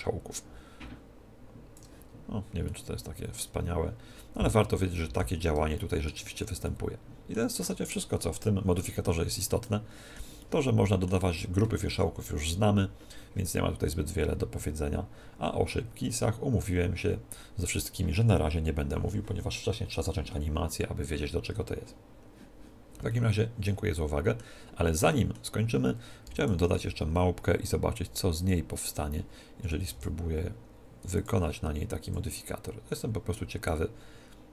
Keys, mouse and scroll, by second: 0.3 click, 2.2-4.4 middle drag, 5.8-8.5 middle drag, 9.6-12.2 middle drag, 23.1-24.9 middle drag, 26.3 middle click, 26.3 x, 26.8 shift+a, 29.6 r, 31.2 click.